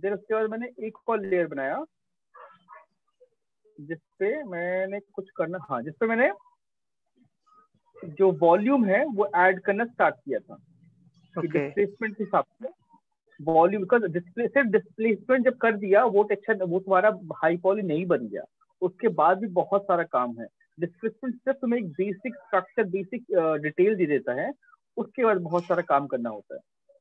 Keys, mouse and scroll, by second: 0.3 click, 4.1 right click, 5.6 alt+click, 6.8 right click, 9.3 click, 12.4 click, 26.8 click.